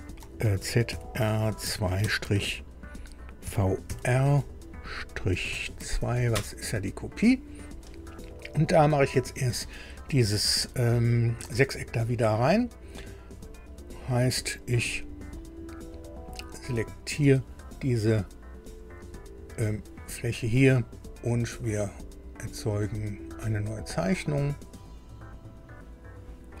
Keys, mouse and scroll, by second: 0.6 shift+z, 0.9 shift+r, 1.6 shift+2, 2.0 -, 3.4 shift+v, 3.8 shift+r, 5.4 -, 5.8 2, 6.3 Return, 16.7 click, 23.9 click.